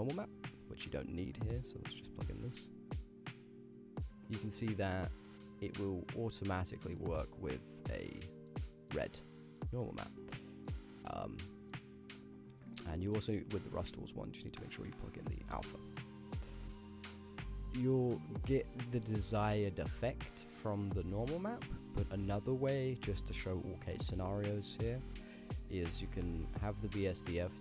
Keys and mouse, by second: 0.9 click, 2.1-3.4 drag, 4.4 shift+middle click, 5.3 shift+click, 6.3 click, 6.9 middle click, 8.4 middle click, 8.8 middle click, 9.3 click, 10.6 middle click, 10.9 middle click, 11.6 middle click, 12.6 middle click, 13.1 middle click, 14.2-15.5 drag, 16.8 shift+middle click, 17.5 ctrl+click, 17.5 ctrl+middle click, 18.3 ctrl+middle click, 19.2 shift+middle click, 19.6 ctrl+middle click, 20.3 shift+middle click, 21.0 ctrl+middle click, 22.0 shift+middle click, 22.6 ctrl+middle click, 23.9 middle click, 24.8-25.5 ctrl+z, 25.8 click, 26.1 ctrl+z, 26.3 ctrl+z, 26.5 ctrl+z, 26.7 ctrl+z, 26.9 ctrl+z, 27.2 ctrl+z.